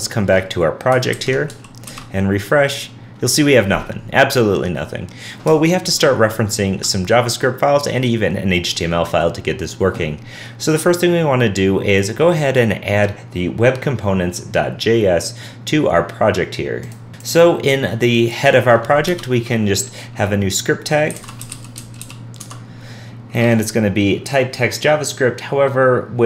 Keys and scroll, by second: 0.9 super+Tab, 1.1 alt+super+Left, 1.9 super+r, 5.8 super+Tab.